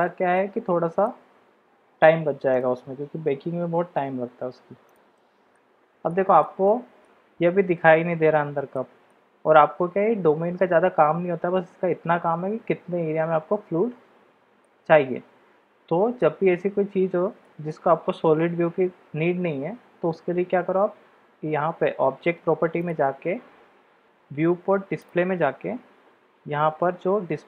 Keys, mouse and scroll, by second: 0.0-0.4 shift+middle drag, 1.0-2.0 middle drag, 2.5 click, 3.6 g, 5.1-5.5 drag, 6.1-6.4 shift+middle drag, 6.7-7.0 middle drag, 8.7-9.2 shift+middle drag, 14.6-16.2 middle drag, 17.4-17.7 shift+middle drag, 22.8 click, 25.0 click.